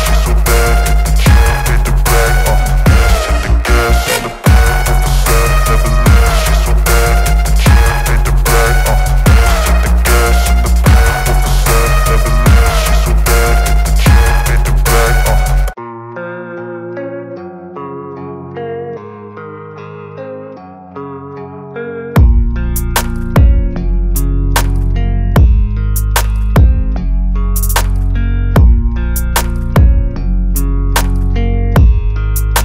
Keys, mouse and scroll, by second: 1.1 ctrl+t, 3.5-4.8 drag, 5.2-9.3 drag, 11.9 shift+click, 12.7-16.2 drag, 17.9 right click, 19.2 click, 22.8-28.3 drag.